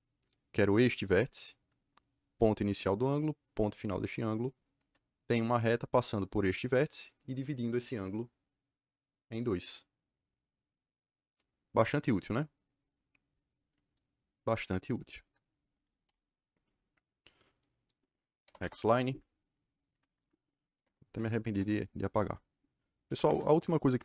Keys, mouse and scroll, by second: 0.9 click, 2.6 click, 3.9 click, 4.7 KP_Enter, 14.6 click, 15.2 click, 16.0 Delete, 18.1-19.0 typing, 19.9 Escape, 20.1 Escape, 20.7 u, 20.8 KP_Enter, 21.1 KP_Enter, 21.5 KP_Enter, 22.7-23.6 typing.